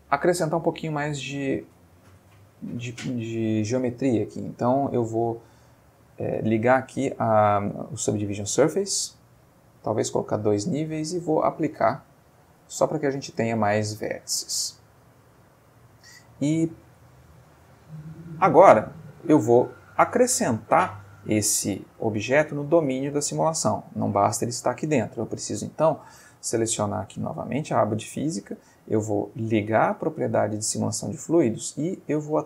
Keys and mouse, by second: 1.2 click, 8.2 click, 9.6 click, 11.5 click, 12.1 click, 12.9 Tab, 13.6-14.6 middle drag, 14.5 Tab, 15.2-17.0 middle drag, 17.1-19.5 ctrl+middle drag, 23.5 middle click, 26.2 click, 30.3 click.